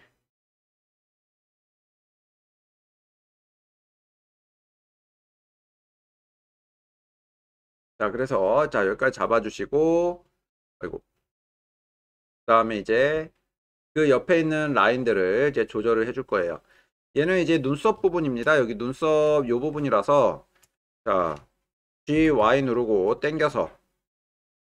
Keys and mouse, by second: 9.9-11.5 middle drag, 12.6-13.1 middle drag, 13.3-13.6 ctrl+middle drag, 13.8-15.4 middle drag, 18.1-18.4 shift+middle drag, 18.6-19.2 ctrl+middle drag, 19.9-20.6 shift+middle drag, 20.9 ctrl+middle click, 22.2 g, 22.4 y.